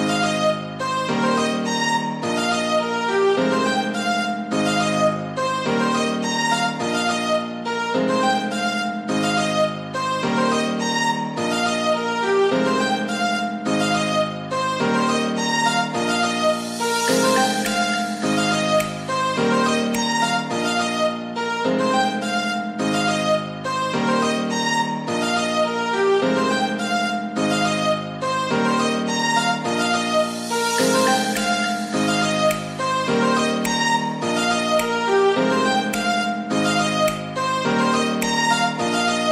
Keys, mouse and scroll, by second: 26.7-30.4 right drag.